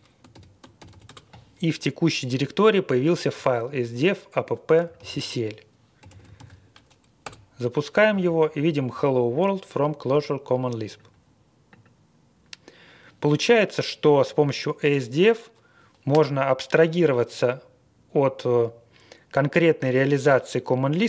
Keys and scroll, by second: 0.3 ctrl+l, 0.9 ctrl+l, 1.0 Return, 4.9 super+c, 5.9 typing, 6.3 super+v, 7.2 Return.